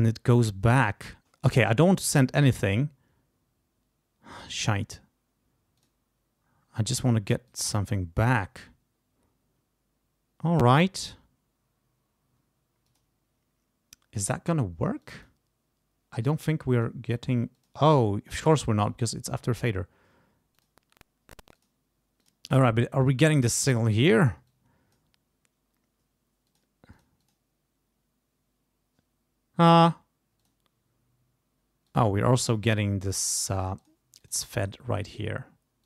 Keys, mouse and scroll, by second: 5.8 click, 7.5 click, 7.9 click, 10.6 click, 12.9 click, 15.0 click, 16.8 click, 17.5 click, 18.9 click, 20.6 click, 21.6 click, 22.2 click, 24.5 click, 26.5 click, 26.9 click, 30.4 click, 31.9 click, 32.6 click, 33.8 click, 34.2 click, 34.6 click.